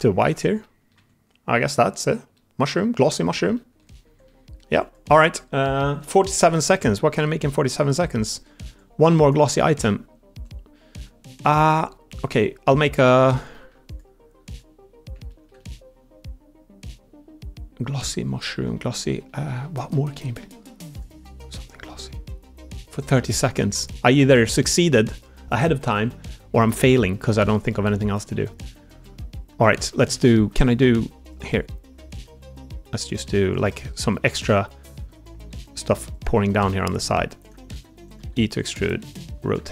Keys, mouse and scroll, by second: 0.5 click, 0.8 Tab, 1.4 click, 2.2-3.2 middle drag, 3.4 middle drag, 3.9 Tab, 4.1 middle click, 6.1 middle click, 6.6 middle click, 7.0 Tab, 7.4 middle click, 8.1 middle click, 13.4 middle click, 15.2 shift+middle drag, 15.5-18.5 middle drag, 19.2 middle click, 19.8 shift+middle click, 20.2 middle click, 21.9 middle click, 23.2 middle click, 26.5 middle click, 27.8 middle click, 28.2 Tab, 28.8 middle click, 29.2 middle click, 29.9 Tab, 32.1 Tab, 32.1 3, 32.7 middle click, 33.7 middle click, 34.9 shift+d, 35.4 r, 36.3 click, 36.6 g, 37.6-39.7 typing, 38.5 click.